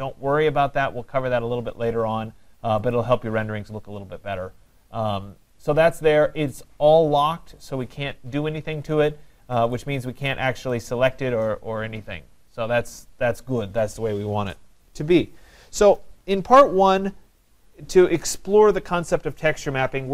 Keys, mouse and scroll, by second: 2.9-7.8 drag, 7.9 click, 9.8 click, 10.7 click.